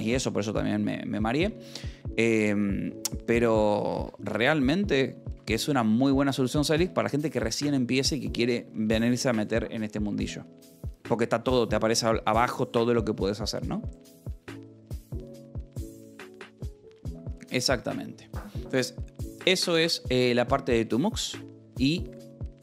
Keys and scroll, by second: 4.4 ctrl+a, 4.6 0, 5.7 w, 6.2 k, 7.4 Return.